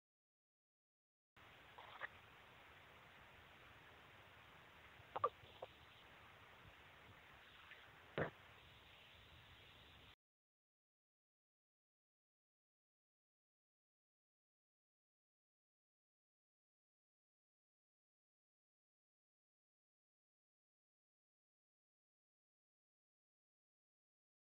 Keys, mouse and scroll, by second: 0.2 click, 1.2 click, 1.3 space, 8.4-10.0 drag, 10.0 space, 11.3 ctrl+shift+p, 12.6 click, 13.4 click, 14.6 click.